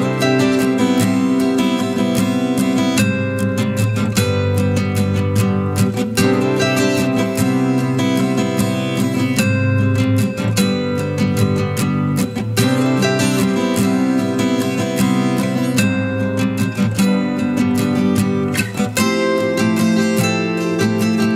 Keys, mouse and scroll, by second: 0.1 ctrl+alt+shift+e, 16.6-17.1 typing, 18.5-19.8 typing.